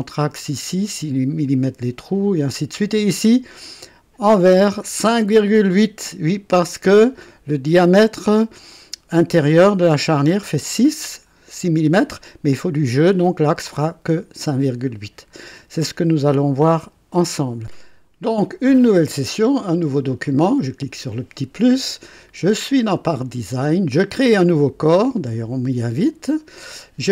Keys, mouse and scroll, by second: 16.5 click, 20.2 click, 26.0 click.